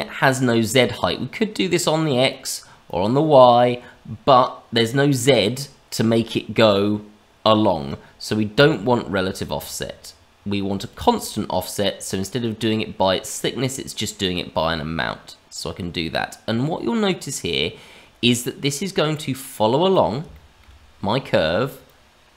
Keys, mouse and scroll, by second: 0.9 click, 2.8 click, 8.5 click, 9.5 click, 10.8 click, 11.1 click, 14.0 click, 20.3 shift+middle click, 20.7-21.8 scroll down 2, 21.8 click.